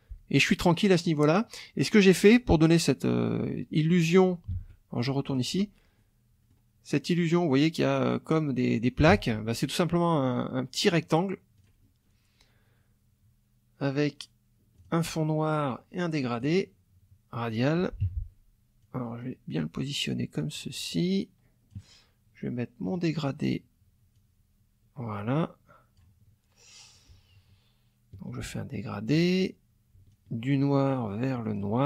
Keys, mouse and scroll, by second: 4.6 alt+Tab, 5.3 alt+click, 6.0 click, 9.2 alt+Tab, 11.6 click, 14.8 click, 16.4 click, 18.0 F1, 18.8 click, 20.5-21.9 drag, 22.9 click, 24.1-26.2 drag, 26.9-29.3 ctrl+drag, 30.1-31.7 ctrl+drag.